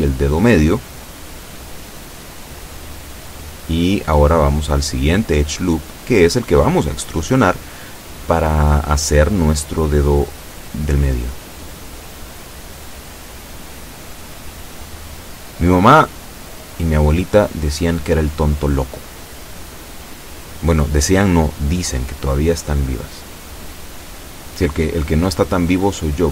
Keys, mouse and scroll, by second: 2.9 shift+middle click, 4.2 ctrl+r, 4.5 ctrl+click, 6.3 click, 7.6 a, 7.9 b, 8.5 click, 9.4-10.5 drag, 11.2-12.5 drag, 12.7-13.0 scroll up 1, 13.4 shift+middle click, 14.7-15.7 drag, 16.6-17.8 shift+drag, 18.8 b, 19.5 click, 21.0 e, 22.7 click, 23.7-25.3 drag, 25.8 a, 26.1 b.